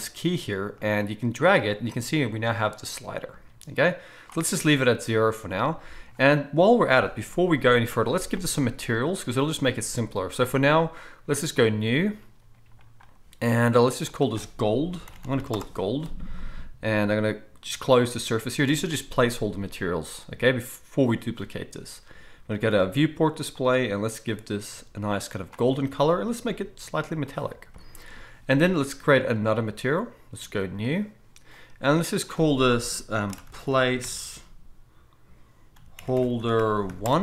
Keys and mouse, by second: 0.8-8.7 middle drag, 8.7-11.6 right drag, 11.6-23.7 middle drag, 23.7-26.4 right drag, 26.4-37.2 middle drag.